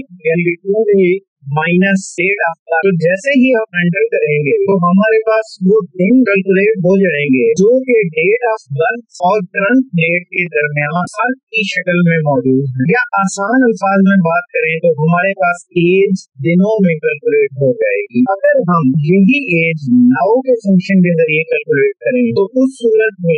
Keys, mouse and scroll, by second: 2.3 =, 3.3-6.6 typing, 8.0 -, 9.3 Page_Up, 10.7 Left, 13.0 Return, 13.9 Up, 15.3 ctrl+1, 17.5 click, 18.2 click, 20.4 Up, 20.5 Right, 20.9 Down, 22.1-23.3 typing.